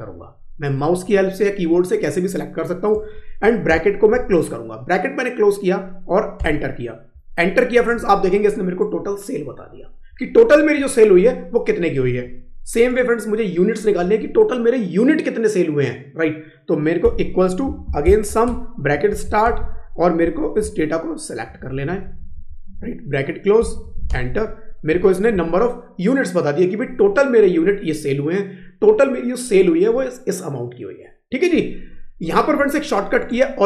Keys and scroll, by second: 20.2 Up, 23.5 ctrl+shift+0, 24.8 Up.